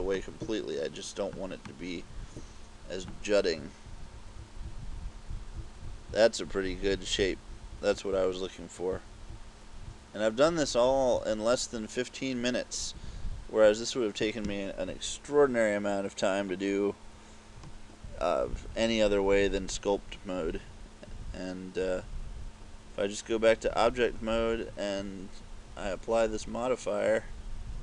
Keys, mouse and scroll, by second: 0.2 click, 1.7 click, 3.6-11.2 typing, 13.0 KP_6, 17.6 Escape.